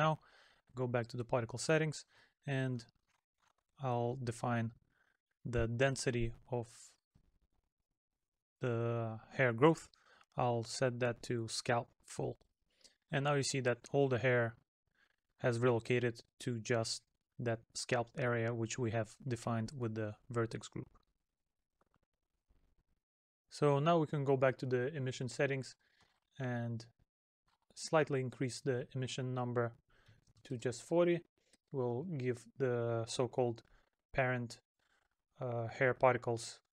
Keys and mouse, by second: 12.7 middle click, 16.7 middle click, 31.5 middle click, 35.9 middle click.